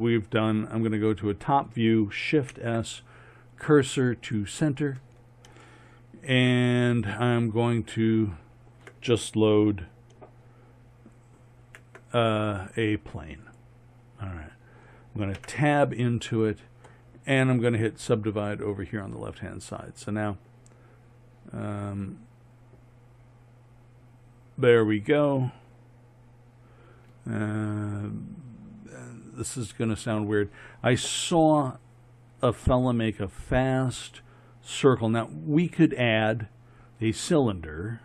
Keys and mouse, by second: 2.5 shift+s, 11.6 shift+a, 15.4 Tab, 18.3 click, 28.0-38.0 middle drag.